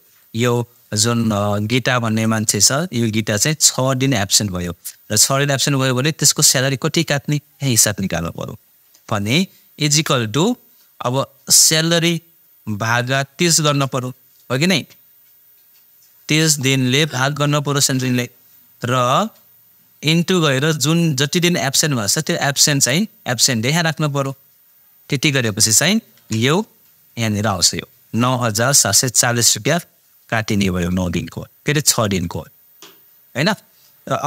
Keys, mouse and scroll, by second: 6.2 click, 9.9 =, 11.8 click, 21.6 click, 27.4 click, 32.2-34.2 drag.